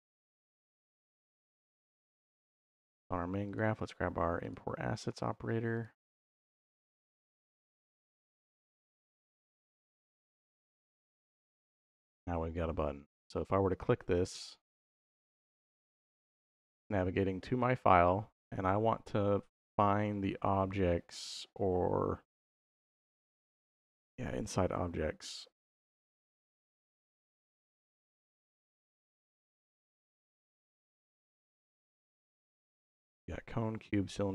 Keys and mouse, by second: 1.7 click, 3.3-4.4 drag, 5.6-8.7 drag, 7.6 s, 9.9 click, 13.7 click.